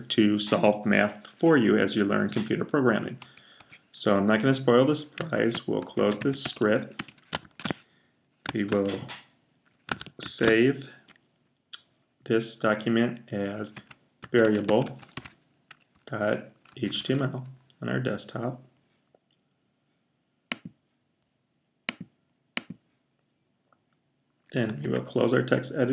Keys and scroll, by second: 5.0-7.8 typing, 10.1 shift+super+s, 13.4-17.4 typing, 24.7 super+h.